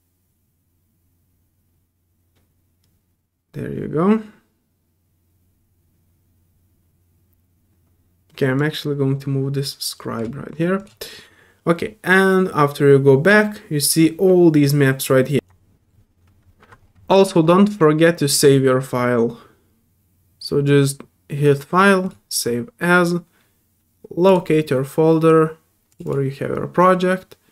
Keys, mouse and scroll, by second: 4.4 typing, 8.6-10.5 drag, 10.8 click, 13.2-14.4 middle drag, 15.3 ctrl+f.